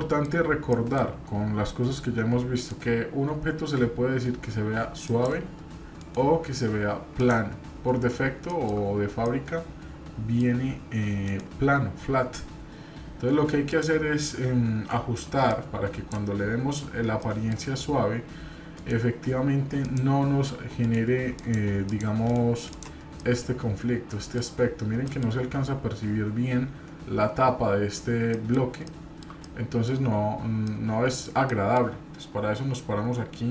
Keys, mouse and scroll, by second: 2.5 right click, 5.9-7.3 right drag, 9.2-10.4 shift+middle drag, 9.2-9.5 scroll up 1, 11.2-20.0 right drag, 18.7 scroll down 2, 20.8 right click, 22.2-23.2 right drag, 23.2-24.4 middle drag, 28.3 middle drag, 28.5 scroll down 1, 29.4-29.8 shift+middle drag, 30.6-31.2 middle drag, 31.5 middle drag.